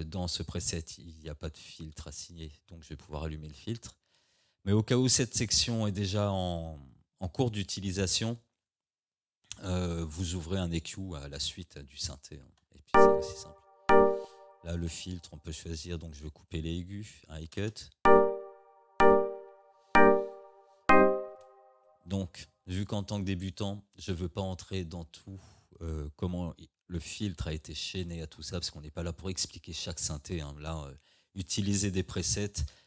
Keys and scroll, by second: 12.4 space, 14.2 space, 17.5 space, 21.3 space.